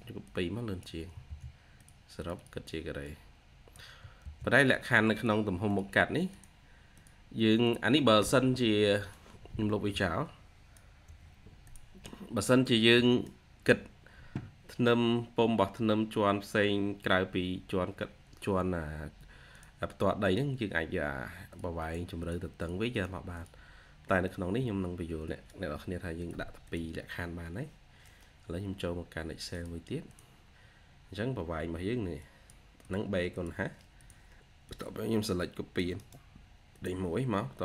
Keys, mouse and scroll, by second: 1.2 ctrl+c, 2.1 double click, 3.9-4.6 typing, 10.9 Delete, 13.5 Delete, 21.7 double click, 25.4 Delete, 26.5 double click, 31.0-32.0 scroll up 1, 35.8 right click, 36.7 right click, 36.8 typing.